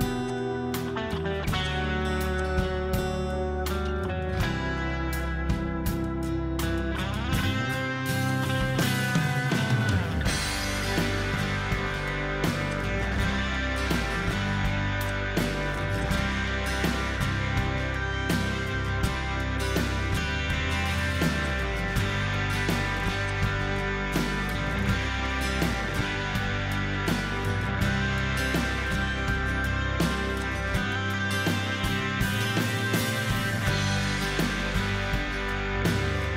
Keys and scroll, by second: 5.3-7.5 typing, 8.0-8.7 Escape, 8.9-10.8 typing, 10.9-11.4 Return, 13.4 h, 13.9 h, 15.5 h, 18.7 z, 21.2 h, 23.1 z, 27.0 h.